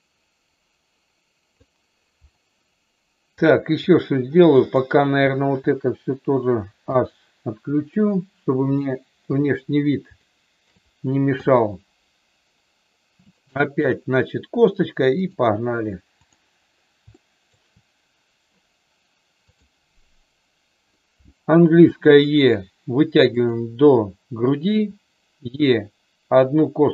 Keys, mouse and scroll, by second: 3.4 click, 4.6 click, 6.7 h, 7.9 middle click, 9.1 KP_1, 10.1 shift+middle click, 13.2 click, 15.2-16.2 drag, 17.1 shift+middle click, 19.5 click, 21.7 e, 23.3 click, 24.7 e.